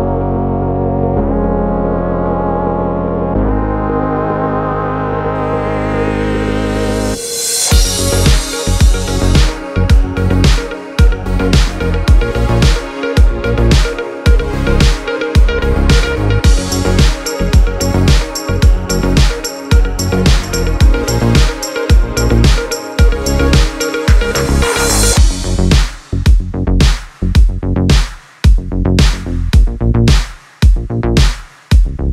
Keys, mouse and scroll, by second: 0.3 F9, 2.5 click, 3.4 ctrl+o, 4.7 scroll down 1, 5.9 click, 7.9 click, 11.4 click, 11.6 F4, 12.4 click, 15.6 F9, 17.0 click, 18.4 ctrl+o, 18.6-19.0 scroll down 1, 19.0 click, 20.2 click, 23.9 click, 26.3 click, 27.2 F9.